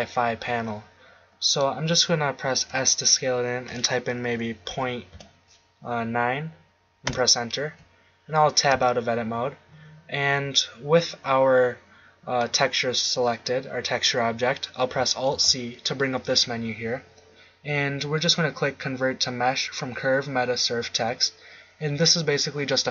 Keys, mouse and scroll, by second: 1.6-2.6 drag, 2.6 s, 8.1 middle click, 8.7 Tab, 15.3 alt+c.